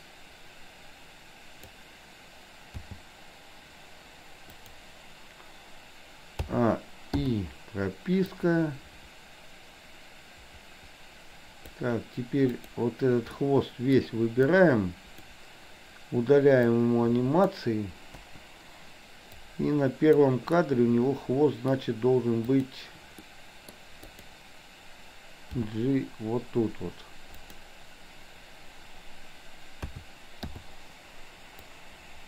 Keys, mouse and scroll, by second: 2.9 g, 6.5 a, 7.3 i, 8.4-11.8 drag, 12.5 click, 13.3-14.0 middle drag, 14.7-15.4 drag, 16.7-17.5 drag, 18.3 Delete, 19.5 click, 20.7-21.7 middle drag, 22.5 click, 23.3 middle click, 24.2 click, 25.7 g, 29.9 a, 30.5 i, 31.8-32.2 drag.